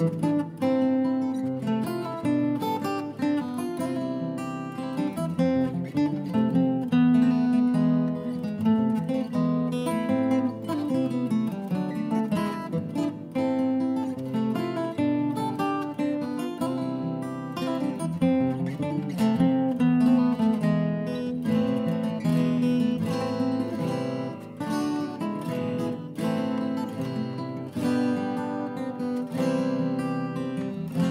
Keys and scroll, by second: 0.4-1.1 shift+Up, 1.1 shift+Right, 1.2 shift+Right, 4.5 shift+Up, 4.6 shift+Up, 4.8 shift+Right, 4.9 shift+Right, 5.0 shift+Right, 10.5-11.2 shift+Right, 11.2 shift+Down, 17.1 shift+Down, 17.1 shift+Down, 29.0 shift+Up, 29.1 shift+Up, 29.3 Down, 30.9 Down, 31.0 Return.